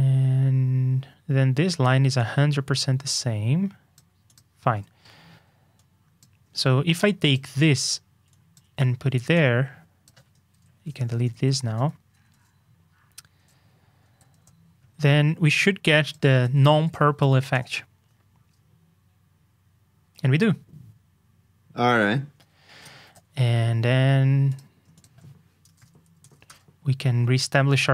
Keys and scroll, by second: 7.6 super+x, 10.8 shift+super+k, 12.3 super+s, 16.4 super+c, 16.8 super+j, 23.0 super+j.